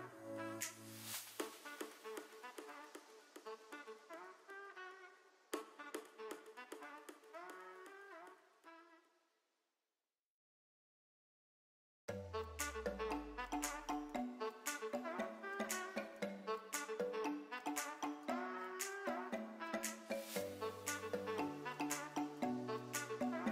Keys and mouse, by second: 0.1 g, 0.7 click, 1.0-3.6 middle drag, 4.5 middle drag, 5.0 middle drag, 5.4 click, 7.5 ctrl+j, 9.0 ctrl+space, 11.3 shift+click, 11.9-12.2 shift+middle drag, 12.6 click, 13.6 g, 13.7 z, 14.9 click, 15.4 middle click, 16.1 drag, 16.6 shift+click, 18.6 ctrl+p, 20.4 ctrl+space.